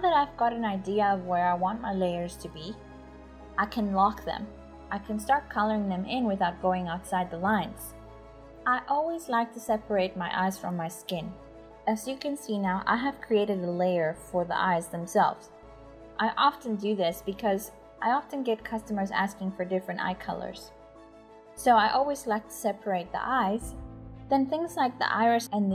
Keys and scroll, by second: 0.0-1.4 typing, 2.5-8.2 typing, 9.4 typing, 13.1-15.6 typing, 17.4-18.4 typing, 19.7 [, 21.5-25.6 typing.